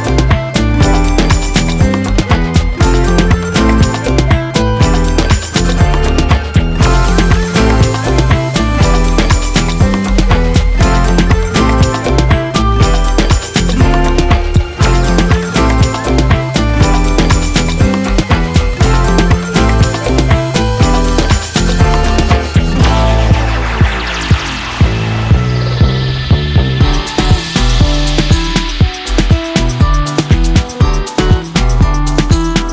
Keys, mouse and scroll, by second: 0.0-1.1 middle drag, 1.1-3.4 drag, 5.9 middle click, 6.6 scroll up 4, 6.8 middle click, 7.0 shift+a, 8.0 click, 8.6 shift+a, 9.4 click, 9.6 middle click, 10.6 click, 11.1 scroll down 6, 11.3 middle click, 11.7-12.1 scroll up 9, 12.1 click, 12.7 shift+a, 14.3 drag, 16.3 click, 17.7 drag, 19.0 click, 20.2 click, 20.8 scroll down 4, 21.0-22.2 shift+middle drag, 22.2 shift+a, 24.5-26.8 drag, 27.0 ctrl+t, 27.1-27.6 middle drag, 27.6 click, 28.5-29.0 scroll up 1, 29.0-29.3 scroll up 1, 29.3-30.8 drag, 31.5-32.7 drag.